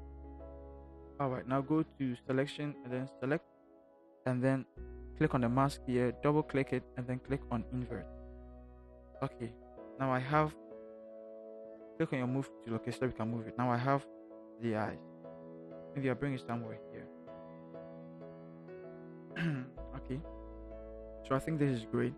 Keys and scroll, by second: 10.3 v.